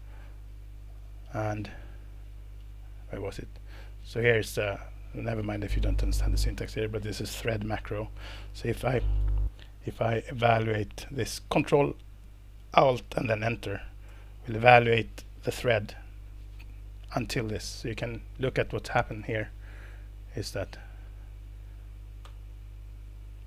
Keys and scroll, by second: 14.1 ctrl+alt+Return, 19.2 ctrl+alt+Return, 22.2 ctrl+alt+Return.